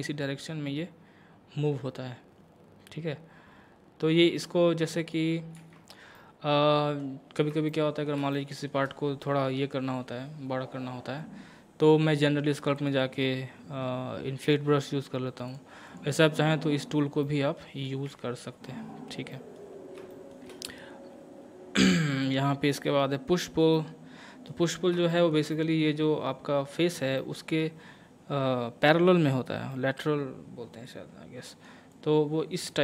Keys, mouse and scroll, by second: 0.2-5.6 drag, 5.6 ctrl+z, 6.2 middle click, 7.2 scroll down 1, 7.7-12.8 shift+middle drag, 12.8 click, 15.5 click, 15.5 click, 17.2 middle click, 18.1 Tab, 19.3 middle click, 19.7 scroll up 1, 20.1 shift+middle click, 21.1-21.8 scroll down 1, 22.2-23.7 drag, 23.7 middle click, 24.6 scroll up 1, 25.1 shift+middle click, 25.5-27.2 middle drag, 29.7-31.9 middle drag, 31.9-32.8 drag.